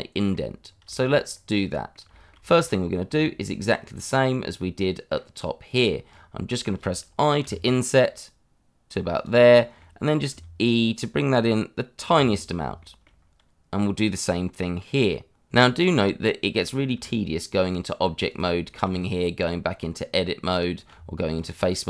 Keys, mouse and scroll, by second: 0.6 scroll down 1, 0.9 shift+middle click, 1.2 scroll up 1, 1.6 middle click, 2.5 click, 3.1 Tab, 3.9 click, 4.8 middle click, 5.7 scroll up 1, 6.1 middle click, 7.3 i, 9.2 click, 9.4 middle click, 10.3 e, 11.9 click, 12.2 scroll down 1, 12.9 shift+middle click, 16.9 Tab, 18.2 click, 18.8 Tab.